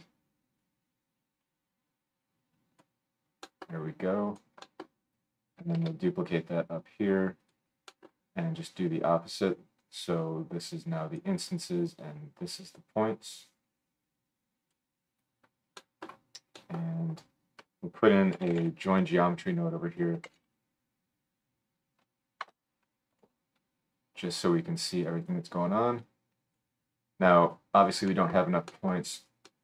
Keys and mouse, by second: 1.4-1.8 middle drag, 2.8 click, 2.8-7.5 middle drag, 2.8 right click, 3.6-4.6 drag, 3.6-4.6 right drag, 5.8 shift+d, 7.5-7.8 drag, 7.8 right click, 7.9 click, 8.0 right click, 8.2-13.3 drag, 9.8-13.3 middle drag, 9.8-13.3 right drag, 15.8 middle click, 16.0-23.3 middle drag, 17.6 F3, 23.3-24.2 drag, 24.2-29.6 middle drag.